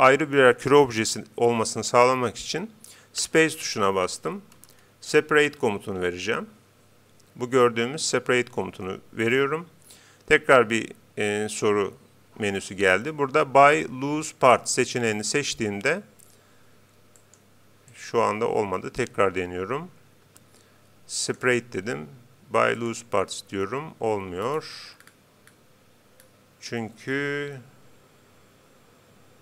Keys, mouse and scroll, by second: 3.2 space, 17.1-19.5 right drag, 20.2 space, 23.7 Escape, 24.4-27.2 middle drag, 27.2-28.2 scroll down 1.